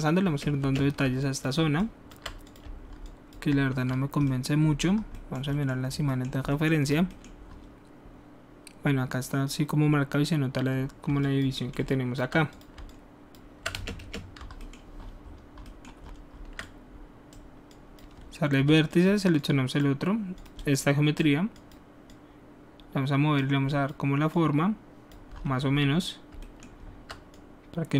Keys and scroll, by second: 0.3 space, 0.6 space, 13.7-14.3 typing, 18.5 w.